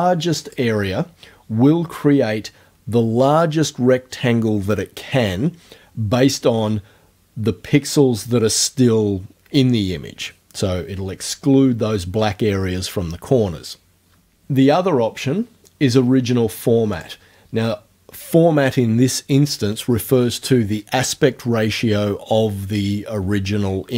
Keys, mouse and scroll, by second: 0.5 click, 14.7 click, 17.0 click.